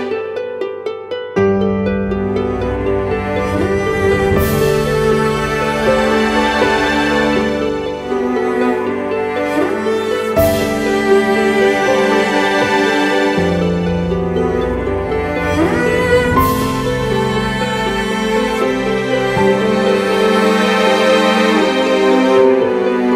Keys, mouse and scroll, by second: 2.3 ctrl+BackSpace, 4.0 ctrl+d.